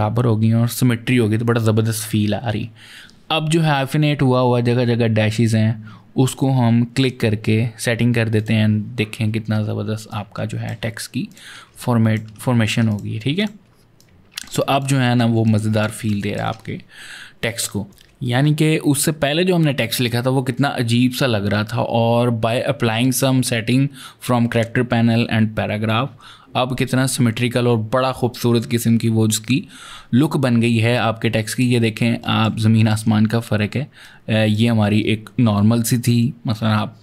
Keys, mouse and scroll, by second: 6.8 click, 8.2 click, 9.9 click, 11.1 click, 11.6 ctrl+click, 12.1 ctrl+space, 12.7 click, 13.2 shift+click, 14.6 click, 15.3 ctrl+click, 15.7 ctrl+space, 15.9 click, 16.2 space, 16.3 space, 17.9 click, 30.3-31.9 typing, 30.5 click, 32.1 ctrl+click, 32.4 double click, 33.8 click.